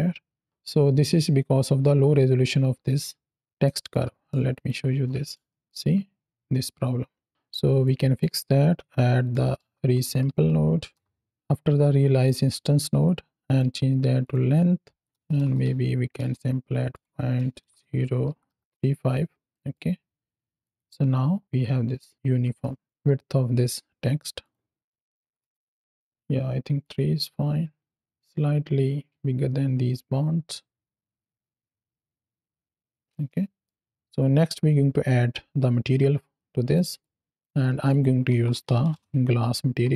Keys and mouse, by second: 3.5 middle click, 4.4 ctrl+shift+click, 5.4 shift+middle drag, 7.7-8.1 drag, 13.4-14.2 drag, 14.9-16.1 drag, 16.8-18.6 drag, 19.4 middle click, 20.6 click, 20.9 x, 22.5 shift+middle drag, 24.3-25.4 drag, 26.0 click, 28.0 space, 29.1 space, 29.7 space, 32.9 space, 33.1-33.5 middle drag, 33.7 KP_7, 36.6 middle click, 37.2 click, 37.6 shift+a.